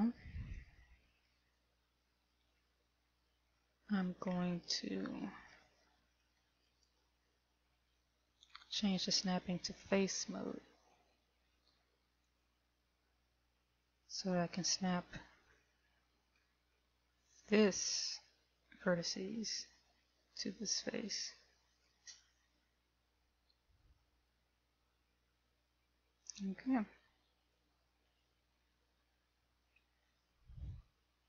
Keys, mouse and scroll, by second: 1.8 shift+middle click, 3.2-3.9 scroll up 5, 3.9 scroll down 1, 4.8 scroll down 2, 6.0 shift+middle click, 7.0 right click, 8.1 g, 12.8 click, 15.0-15.4 scroll up 3, 16.1 shift+middle click, 17.0-17.4 scroll up 3, 19.8 click, 25.8 a, 26.8-27.1 scroll down 3, 27.8 click, 28.8 click, 30.6 KP_1.